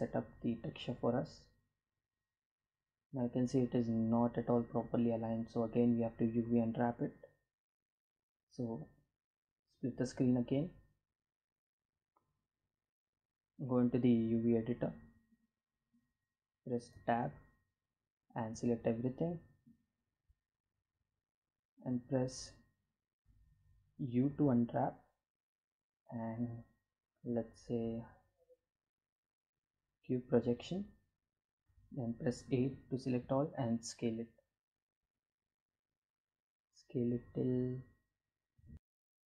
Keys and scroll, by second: 15.5 Tab, 17.1 a, 22.9 u, 30.5 a, 31.5 s.